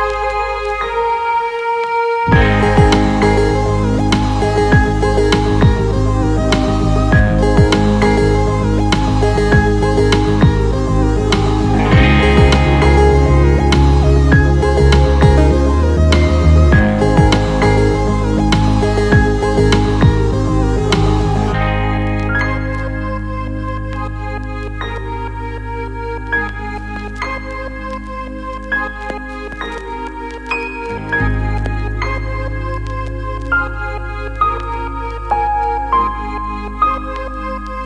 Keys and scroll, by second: 0.0 ctrl+z, 3.1 ctrl+z, 5.3 ctrl+0, 17.1 ctrl+d, 18.2 ctrl+0, 22.2 ctrl+t.